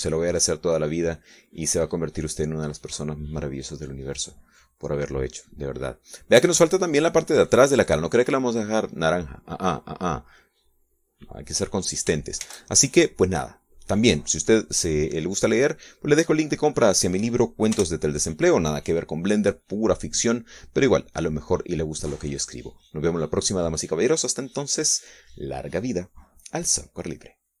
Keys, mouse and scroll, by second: 0.2 shift+click, 4.5-8.9 drag, 8.9-10.5 middle drag, 10.7-12.4 drag, 14.2 shift+z, 14.9 click, 15.7 middle click, 19.5 KP_0.